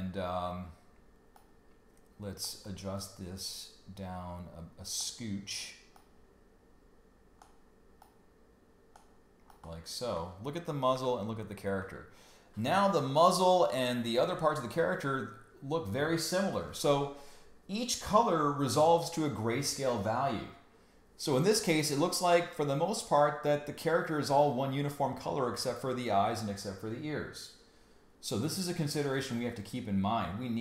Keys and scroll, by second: 10.9 super+y.